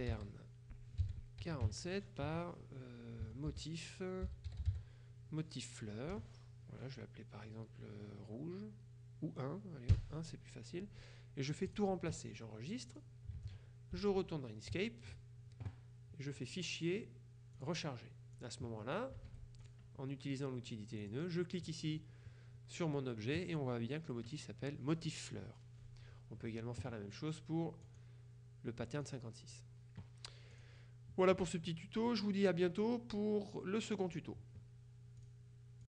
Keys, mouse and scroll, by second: 0.0-1.7 typing, 2.3 Tab, 3.3 Tab, 3.6-5.3 typing, 6.2 Right, 10.0 KP_1, 11.8 click, 13.0 click, 13.5 alt+Tab, 14.3 Tab, 16.5 click, 17.7 click, 18.5 click, 19.4 Escape, 19.7 click, 21.1 click, 27.9 click, 29.2 click, 30.6 click, 31.7 click, 35.3 click.